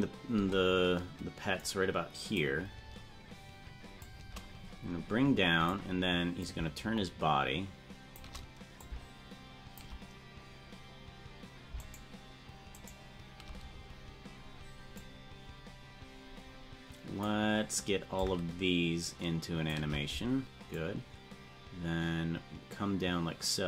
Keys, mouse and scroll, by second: 1.7 click, 1.7 space, 4.0-5.7 shift+drag, 6.4-8.2 drag, 8.8-9.8 shift+drag, 12.1 shift+right click, 13.4 shift+right click, 15.0-17.3 drag, 18.2-19.7 shift+drag, 20.8-23.6 drag.